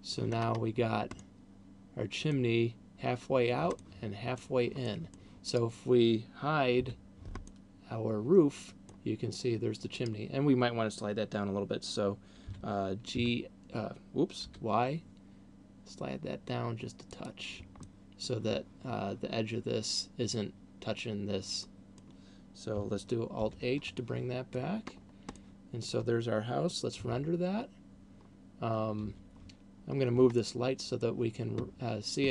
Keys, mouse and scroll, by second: 0.0 middle click, 0.8-1.5 scroll up 4, 1.5 middle click, 4.3 middle click, 5.3 middle click, 5.8 right click, 7.0 h, 7.5 middle click, 10.3 right click, 12.8 g, 17.5 click, 18.0 middle click, 21.8 middle click, 23.8 alt+h, 24.3 middle click, 25.3 scroll down 2, 25.5 middle click, 29.3 Escape, 30.0-30.5 scroll down 1, 30.5 middle click.